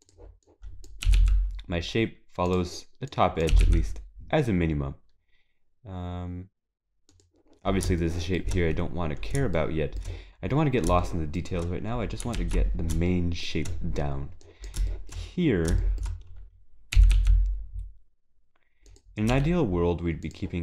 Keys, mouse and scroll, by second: 9.8 shift+middle click, 11.1 shift+middle click, 12.0 shift+middle click, 12.0 scroll down 2, 13.1 shift+middle click, 15.4-15.8 scroll up 1, 15.8 shift+middle click.